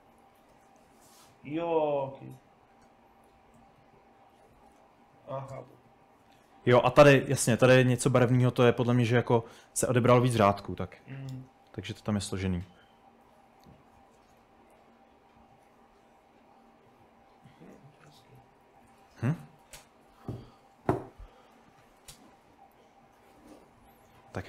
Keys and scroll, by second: 4.6 typing, 6.1-6.6 typing, 10.1-14.6 typing, 18.3-23.5 typing.